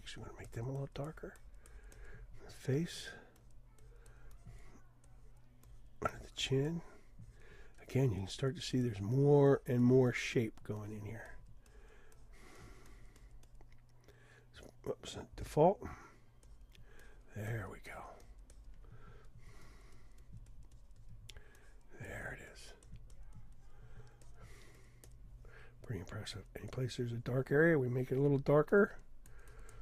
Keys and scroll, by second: 15.5 d, 17.4 d.